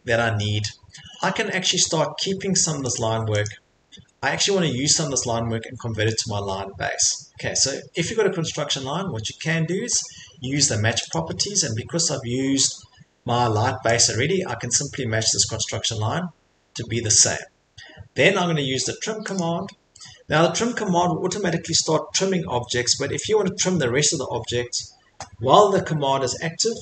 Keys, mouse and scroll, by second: 1.2 middle click, 1.8 middle click, 3.0 click, 3.5 click, 3.8 Escape, 5.5 middle click, 5.6 middle click, 6.1 middle click, 6.1 middle click, 6.2 Escape, 6.5 middle click, 9.5 Escape, 9.9 middle click, 11.1 click, 14.0 click, 15.9 middle click, 16.0 middle click, 16.5 middle click, 17.0 middle click, 17.2 Escape, 19.4 click, 22.3-24.4 drag.